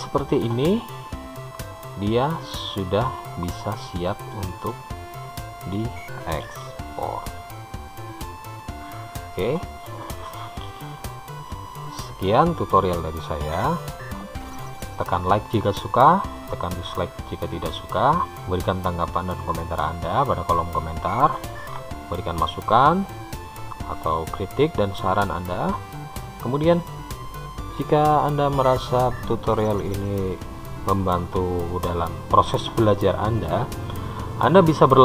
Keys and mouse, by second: 4.1 middle click.